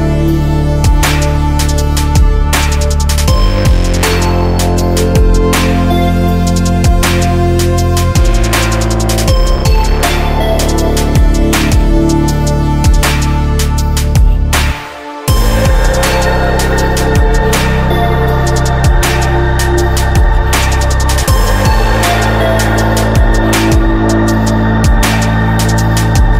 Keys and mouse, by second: 0.9 click, 2.1 click, 3.2-8.1 drag, 8.1 middle click, 9.6 Tab, 13.8 ctrl+r, 14.5 ctrl+r, 15.7 ctrl+r, 16.5 ctrl+r, 20.6 right click, 20.9 middle click, 22.0-23.3 drag.